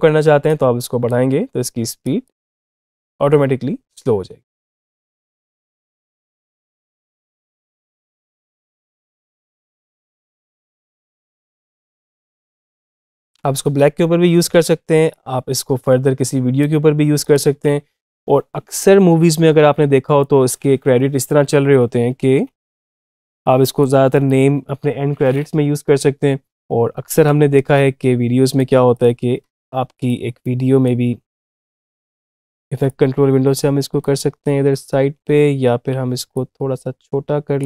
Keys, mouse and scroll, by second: 0.3-1.8 drag, 2.3 space, 13.2 space, 15.0-22.0 drag, 22.0 typing, 22.8 click, 24.3 typing, 26.4-35.5 drag, 35.5 ctrl+z, 36.2-37.6 drag.